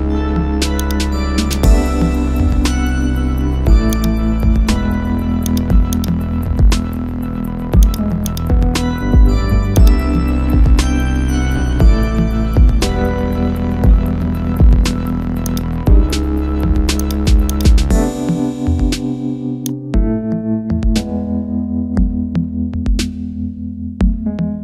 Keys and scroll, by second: 10.5 ctrl+0, 18.8 ctrl+g.